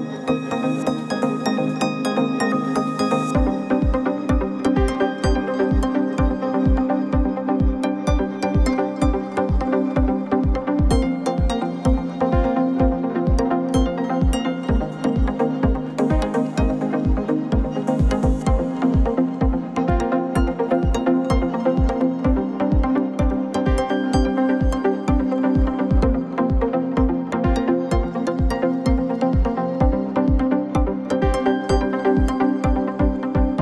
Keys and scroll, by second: 4.4 ctrl+c, 4.7 ctrl+shift+v, 5.2 ctrl+z, 6.7 ctrl+c, 6.9 ctrl+shift+v.